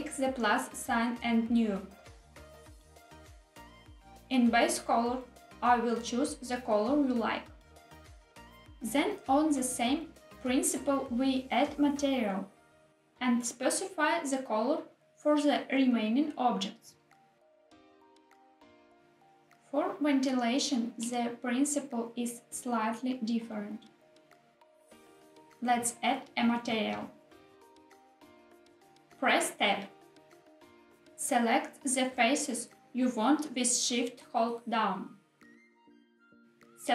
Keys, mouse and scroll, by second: 0.9 click, 3.3 click, 4.6 click, 9.6 click, 11.7 click, 12.4 click, 12.5 click, 13.4 click, 14.9 click, 15.2 click, 15.7 click, 16.1-16.5 drag, 18.7 middle click, 18.8 scroll up 1, 18.9 middle click, 18.9 scroll down 1, 20.0-21.0 shift+middle drag, 21.5 scroll down 1, 25.4 click, 27.4 click, 28.8 Tab, 30.7 scroll up 3, 30.8 click, 32.7 shift+click, 34.7 shift+click.